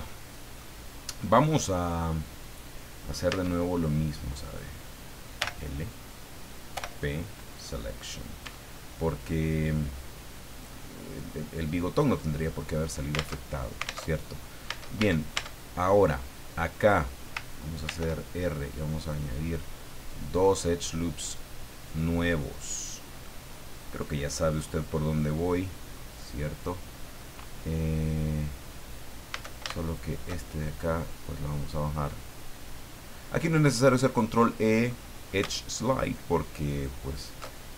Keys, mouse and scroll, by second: 0.0 click, 1.2 right click, 3.3 Tab, 4.4 right click, 5.4 l, 6.7 p, 7.3 click, 8.4 Tab, 9.0-10.2 middle drag, 10.5 right click, 13.3 alt+Tab, 14.0 alt+Tab, 14.7 Tab, 15.2 right click, 15.9-17.1 drag, 17.8 ctrl+r, 18.5 ctrl+scroll up 3, 19.0 click, 21.8 click, 22.3-22.7 scroll up 2, 26.5 click, 29.3 a, 29.8 alt+shift+right click, 31.2-34.3 drag, 36.0 alt+shift+right click, 36.7 alt+shift+right click, 37.1 alt+shift+right click, 37.5 alt+shift+scroll up 1.